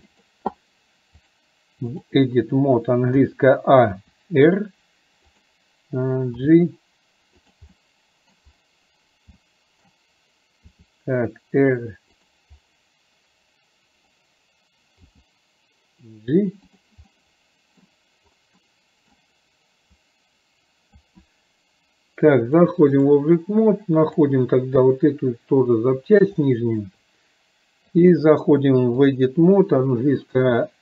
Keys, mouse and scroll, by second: 1.3-2.3 drag, 7.8 middle click, 9.4 middle click, 9.4 scroll up 1, 17.1 middle click, 18.7 middle click, 18.7-19.2 scroll up 1, 20.1-21.2 drag, 22.6 click, 24.2 click, 26.6-26.9 shift+middle drag, 28.1-29.3 drag.